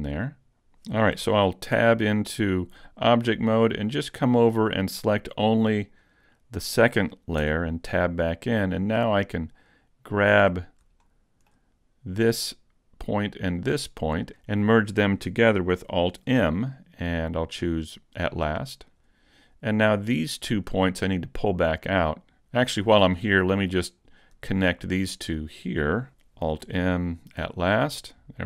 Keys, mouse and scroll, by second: 1.7 Tab, 5.8 click, 7.4 Tab, 8.0 middle click, 9.5 shift+right click, 10.8 scroll up 2, 11.0 shift+middle click, 12.1 right click, 13.6 shift+right click, 14.2 scroll down 1, 16.4 alt+m, 20.0 right click, 20.8 shift+right click, 21.4-21.7 scroll down 1, 21.7 middle click, 22.8-24.0 scroll up 1, 24.0 right click, 25.1 shift+right click, 26.6 alt+m, 28.1 middle click.